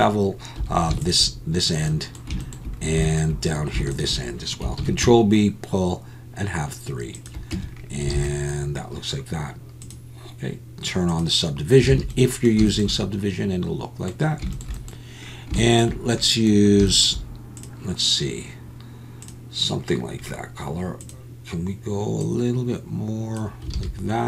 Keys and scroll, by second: 0.6 2, 4.8 ctrl+b, 7.5 Tab, 8.1 alt+a, 11.9 alt+a, 23.7 alt+a.